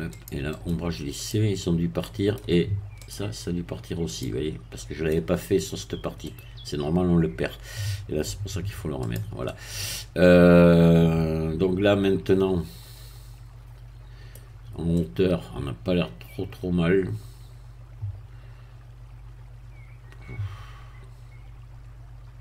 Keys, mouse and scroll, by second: 0.1 click, 0.5 right click, 1.2 click, 2.0 middle click, 3.0 click, 4.1 click, 4.7 middle click, 6.2-9.0 middle drag, 9.0 click, 9.4-14.4 middle drag, 14.4-14.9 scroll down 1, 14.9-22.4 middle drag.